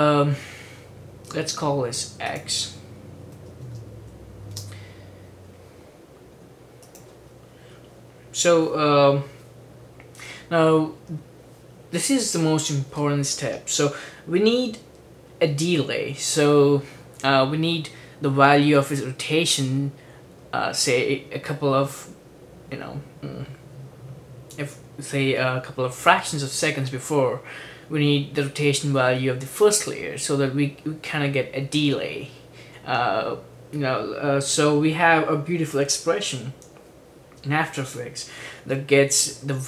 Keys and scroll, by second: 3.3-4.6 typing.